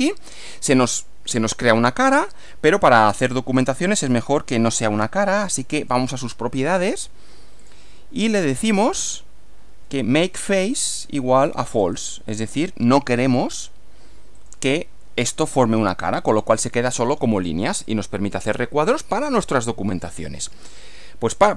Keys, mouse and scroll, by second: 0.4 click, 1.6-2.7 middle drag, 3.6-4.3 drag, 5.8 click, 7.6 click, 8.7 scroll down 2, 10.9 click, 11.8 click, 13.2 click, 14.4 click, 17.7 middle click.